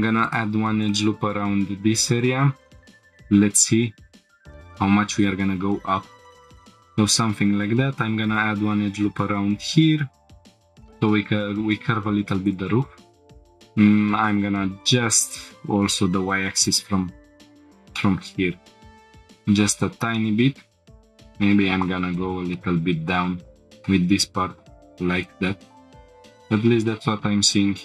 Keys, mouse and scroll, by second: 0.9 right click, 2.2 click, 3.0 scroll up 1, 3.9 scroll up 1, 3.9 g, 4.1 z, 6.2 shift+click, 6.4 shift+middle click, 6.4 scroll down 2, 6.9 scroll up 1, 7.6 ctrl+r, 8.6 right click, 9.4 g, 9.6 z, 10.5 click, 10.8 scroll down 1, 11.6 scroll down 1, 12.5 click, 13.3 scroll up 1, 13.5 drag, 14.3 shift+click, 15.0 g, 15.2 y, 16.6 shift+click, 17.5 scroll down 2, 18.0 shift+middle click, 19.0 click, 19.7-20.0 scroll up 2, 20.1 shift+middle click, 20.9 shift+click, 20.9 g, 20.9 z, 22.1 shift+click, 22.5-23.9 middle drag, 24.4 g, 24.5 z, 25.3 shift+click, 26.0 middle click, 26.0 click, 26.0 scroll down 3, 26.1-26.6 scroll down 2, 26.6-27.6 scroll up 1.